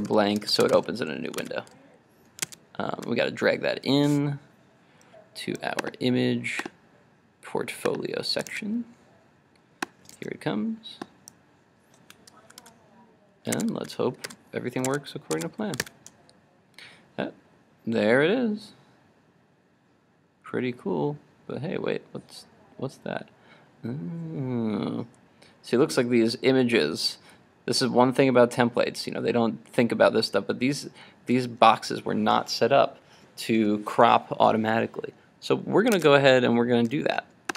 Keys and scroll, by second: 1.4 super+s, 2.6 super+Tab, 12.7 super+s, 13.7 super+Tab, 14.4 super+s, 15.0 super+Tab, 15.9 super+r, 35.9 super+Tab.